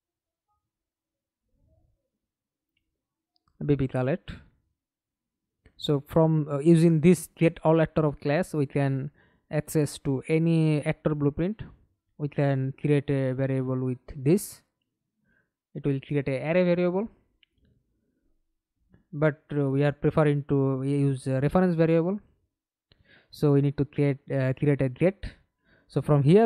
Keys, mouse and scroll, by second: 0.6 middle click, 3.3 right click, 5.1-6.5 typing, 8.1 right click, 13.4-15.3 typing, 20.6-21.6 typing, 22.3 Return.